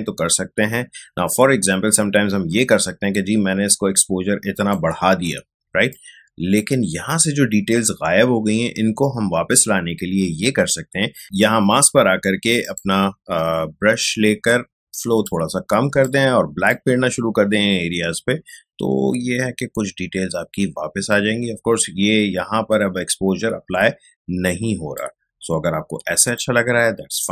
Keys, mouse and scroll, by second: 15.2-26.1 drag, 26.1 space, 26.3 ctrl+click, 26.6 ctrl+space.